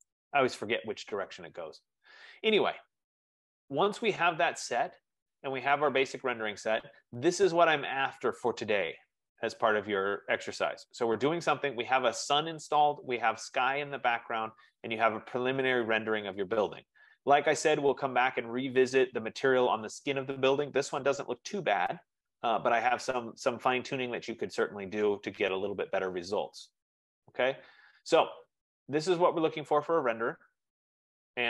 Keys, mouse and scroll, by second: 0.0-0.2 typing, 3.3 click, 6.3 click, 10.1-11.3 drag, 18.8 F15.